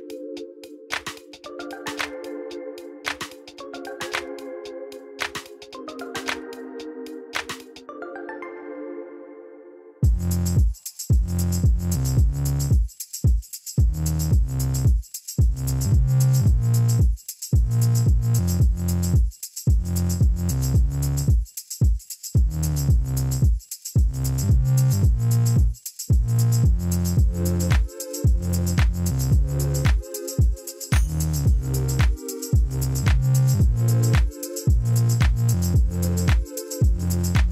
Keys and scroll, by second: 0.5 ., 0.6 7, 0.9 Return, 8.0 shift+a, 9.2-11.6 typing, 15.6 ., 16.5 3, 16.7 Return, 18.6 1, 18.8 Return, 20.8 ctrl+t.